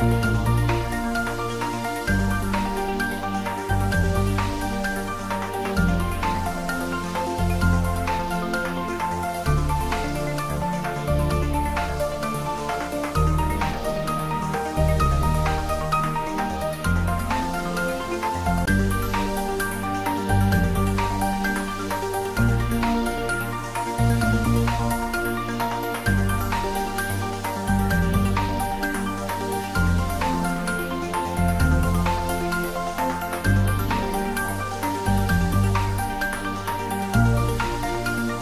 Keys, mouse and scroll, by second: 4.7 scroll down 1, 6.5 click, 6.6-10.0 right drag, 10.0 click, 14.1-14.9 scroll up 1, 14.9 click, 16.4-17.6 typing, 20.2-21.2 typing, 21.5 Return, 23.1-24.4 scroll up 1, 24.4 typing, 26.3 scroll up 1, 26.8 middle click, 27.4-28.1 scroll up 1, 28.1 click, 29.2-30.4 typing, 31.7 Return, 33.6 click, 34.3 scroll down 1, 37.3-37.9 scroll down 1, 37.9 middle click.